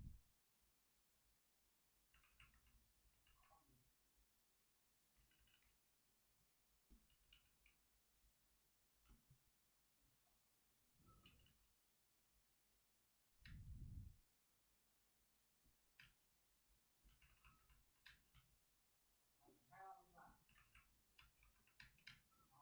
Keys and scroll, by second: 2.1 alt+s, 3.2 alt+s, 5.1 ctrl+z, 5.3 ctrl+z, 5.4 ctrl+z, 7.0 ctrl+z, 7.2 ctrl+z, 11.1 ctrl+z, 11.3 ctrl+z, 13.1 ctrl+z, 13.4 space, 15.9 space, 17.2 alt+s, 17.2 space, 18.0 space, 20.5 alt+s, 21.4-22.6 typing.